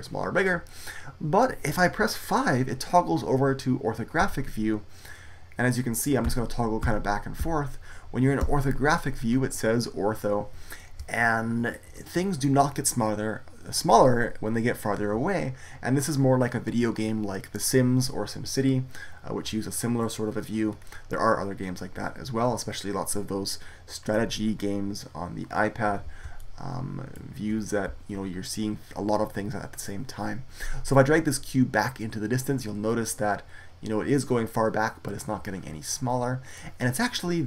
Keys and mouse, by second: 4.1 KP_5, 6.1 KP_5, 6.7 KP_5, 7.3 KP_5, 8.3 KP_5, 20.6-26.3 middle drag, 33.6-35.5 middle drag.